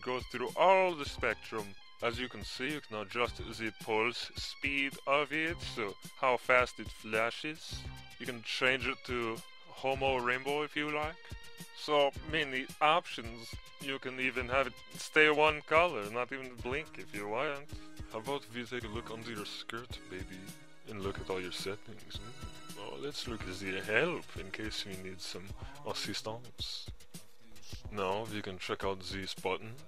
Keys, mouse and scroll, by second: 17.2 Insert, 17.4-29.8 drag.